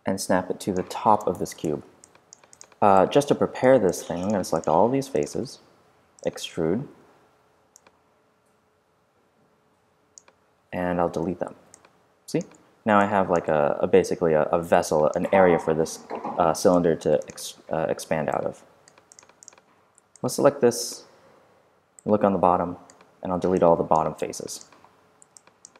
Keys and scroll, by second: 1.1 space, 1.8 super+space, 6.9 r, 11.1 BackSpace, 19.7 f.